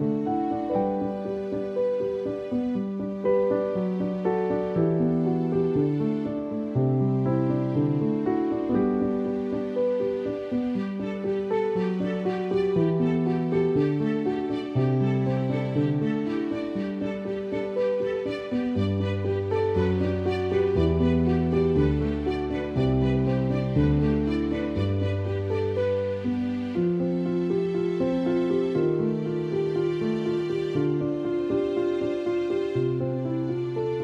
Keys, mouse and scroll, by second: 0.5 space, 0.6 click, 1.2 ctrl+=, 1.9 ctrl+=, 2.1-3.4 typing, 3.2 click, 3.8 click, 6.2 space, 6.3 click, 6.5 space, 7.7 alt+click, 9.6 alt+click, 12.7 alt+click, 14.2 alt+click, 14.7 alt+click, 15.4-16.1 typing, 15.5 click, 16.8 alt+click, 18.0 alt+click, 19.2 alt+click, 19.9 alt+click, 21.0 alt+click, 21.7 alt+click, 23.1-24.0 typing, 23.2 click, 24.6 alt+click, 28.7 alt+click, 28.8 alt+click, 31.6 alt+click, 32.5 space, 32.6 click, 32.8 space, 33.1 alt+click.